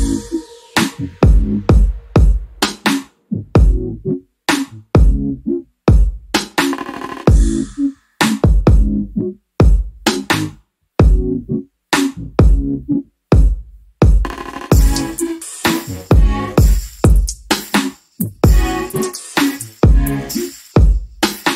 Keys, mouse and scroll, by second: 0.8-1.2 scroll down 1, 1.2 alt+middle click, 3.0 ctrl+click, 9.9 alt+middle click, 10.5-10.9 scroll up 1, 11.3 click, 13.5 right click, 14.3 click, 14.7-15.1 scroll down 1, 15.1 alt+middle click, 16.8 scroll up 1, 17.6 alt+middle click, 19.5 click, 20.6 middle click.